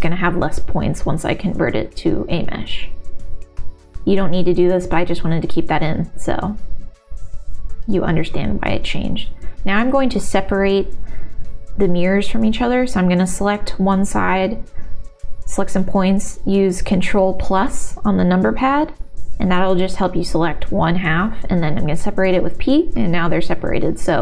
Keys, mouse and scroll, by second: 0.2 q, 1.6 Tab, 4.3 middle click, 4.7 Tab, 5.7 middle click, 6.1 Tab, 7.5 click, 9.2-10.5 ctrl+KP_Add, 11.1 ctrl+KP_Add, 11.1 p, 13.0 Tab, 13.5 middle click, 14.2 shift+middle click, 15.3 Tab, 15.7 Tab, 17.0 Tab, 18.4-20.6 ctrl+KP_Add, 20.8 ctrl+KP_Add, 21.4 p, 22.5 Tab, 23.3 Tab, 24.0 click.